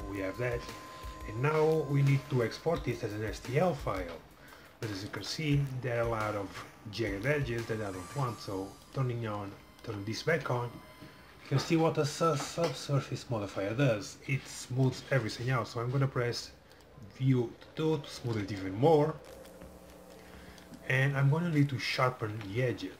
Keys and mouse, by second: 0.0-1.7 drag, 4.5-8.9 middle drag, 8.9-10.8 drag, 9.4-10.6 middle drag, 16.9-18.5 drag, 18.3 middle click, 22.4 Tab.